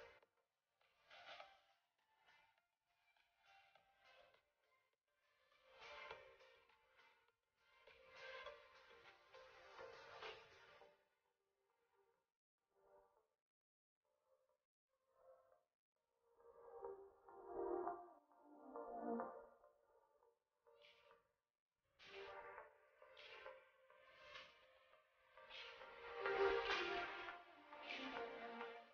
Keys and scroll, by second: 0.2 shift+space, 2.2 ctrl+shift+], 8.0 shift+space, 14.5 shift+space, 21.4 ctrl+c, 22.9 ctrl+v, 24.7 ctrl+x, 27.8 ctrl+v.